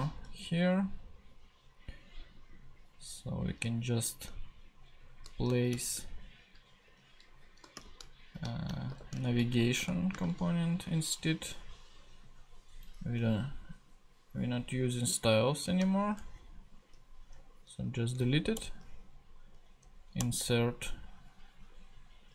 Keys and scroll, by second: 5.7 shift+,, 6.8-10.8 typing, 13.0 Left, 16.0 shift+BackSpace, 18.5 alt+Return, 20.2 Return.